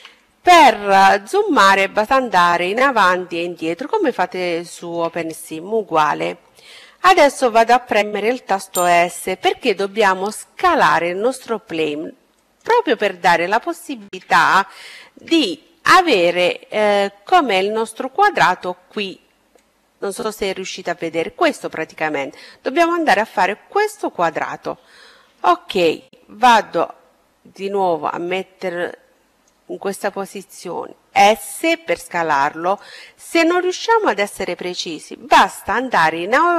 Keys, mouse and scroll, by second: 0.0-5.2 middle drag, 8.7 s, 11.9 middle click, 12.7-15.7 middle drag, 18.5-20.2 drag, 19.5-21.5 middle drag, 25.4-27.1 drag, 28.7-30.5 middle drag, 30.3 s.